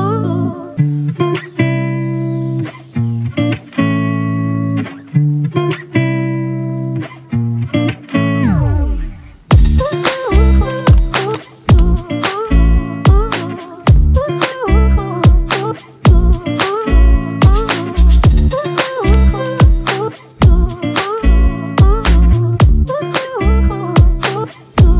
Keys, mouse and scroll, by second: 0.1 alt+shift+click, 3.7 alt+shift+click, 5.7 Up, 6.0 Up, 7.0 Return, 8.0 Up, 8.3 Down, 9.7 Right, 10.1 Right, 10.6 Right, 11.9 Right, 12.8 Right, 13.0 Right, 13.2 Right, 13.6 Right, 16.0-16.4 alt+scroll up 1, 18.5-19.4 alt+scroll up 1, 19.4-21.3 alt+scroll up 1.